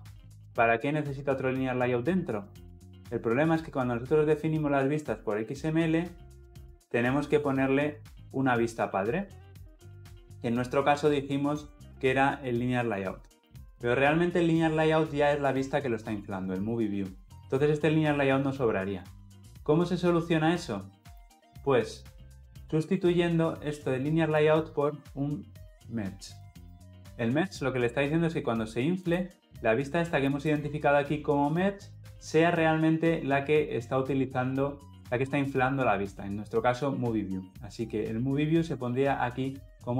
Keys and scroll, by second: 26.2 Tab.